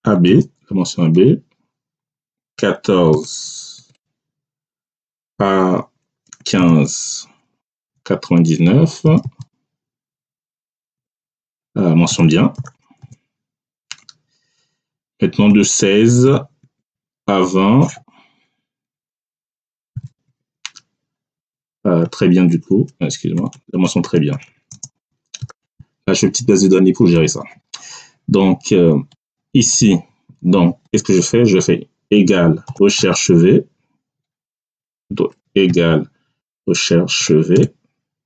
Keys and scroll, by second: 0.1 b, 1.0 Return, 2.5 1, 3.0 4, 3.7 Tab, 6.3 1, 6.5 5, 7.7 ,, 8.9 9, 10.9 Tab, 12.0 b, 12.5 i, 12.6 e, 12.9 n, 13.8 Return, 15.4 1, 16.1 6, 16.5 Tab, 19.0 2, 19.8 0, 20.2 Tab, 21.9 t, 23.3-25.6 typing, 26.6 Return, 32.0 =, 32.6 r, 32.7 e, 32.9 c, 34.3 BackSpace, 35.6-37.4 typing.